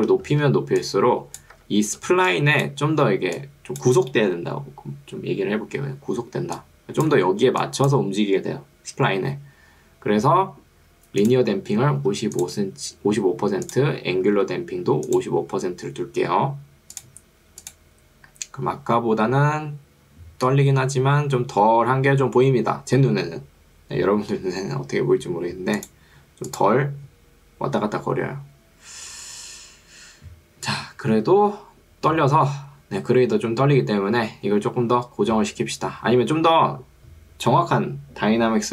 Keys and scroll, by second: 0.4 ctrl+2, 1.6 Escape, 2.0 ctrl+2, 9.0 Escape, 12.0 5, 14.6 5.